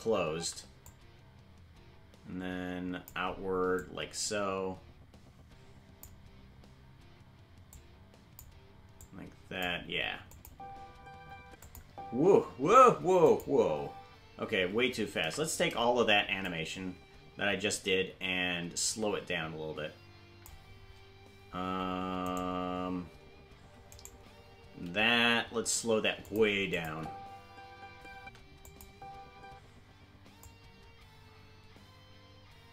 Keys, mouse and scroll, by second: 0.8-3.0 drag, 0.8 space, 3.7-6.0 drag, 7.6 click, 8.9 click, 10.3 click, 10.4 space, 11.6 click, 11.6 space, 11.8 space, 13.2 click, 13.2 space, 13.5 space, 15.2 space, 15.2 a, 16.4-20.4 drag, 26.7-28.0 drag, 26.7 right click, 26.7 g, 26.8 space, 28.6 click, 28.6 space, 28.9 space, 30.4-32.7 drag.